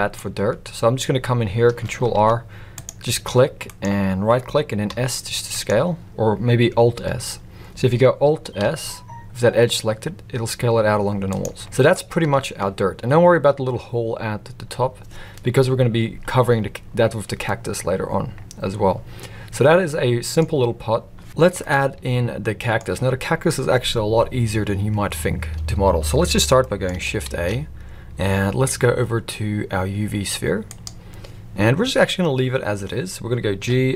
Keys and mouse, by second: 2.0 ctrl+r, 4.8 s, 8.6 alt+s, 11.6 middle click, 12.2 Tab, 17.4-20.3 middle drag, 21.6-22.8 middle drag, 26.6 middle click, 27.3 shift+a, 33.6 g.